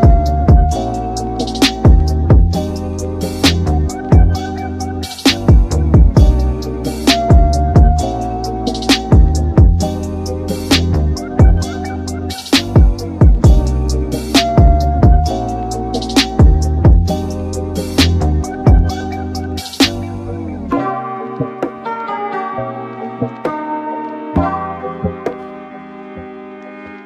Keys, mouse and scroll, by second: 4.9 scroll down 1, 5.0-8.1 middle drag, 8.1 click, 10.0 click, 11.8-15.1 drag, 15.1-16.2 shift+middle drag, 16.2 click, 16.6-17.9 shift+middle drag, 17.9 click, 18.8-20.6 drag, 21.7-24.7 shift+middle drag, 25.1 KP_7, 26.2 scroll up 3.